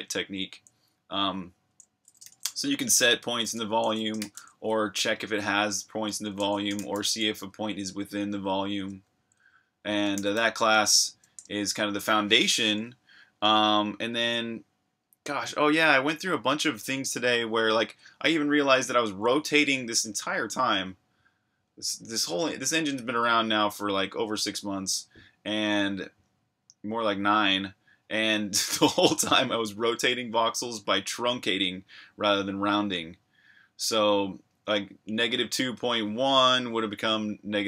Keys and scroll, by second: 1.7-4.8 typing, 3.5 Escape, 6.1-7.4 typing, 8.9 Escape, 9.0 k, 11.4 super+Tab.